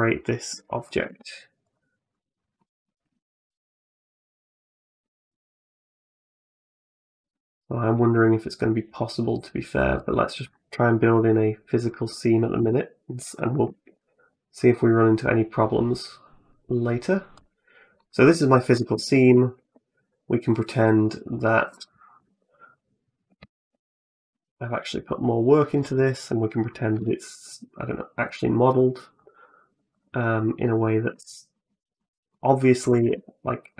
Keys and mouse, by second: 0.3 p, 0.9 Tab, 1.5 right click, 2.4 middle click, 3.0 shift+right click, 4.0 right click, 4.7 Tab, 5.1 a, 7.1 e, 12.4 a, 13.5 alt+s, 18.1 shift+middle click, 18.3 shift+middle click, 19.0 ctrl+r, 22.1 3, 22.5 right click, 23.3 alt+right click, 24.1 i, 26.8 e, 29.7 click, 30.5 middle click, 30.9 Tab, 31.3 middle click, 31.8 middle click, 32.7 a, 32.8 a, 33.4 right click.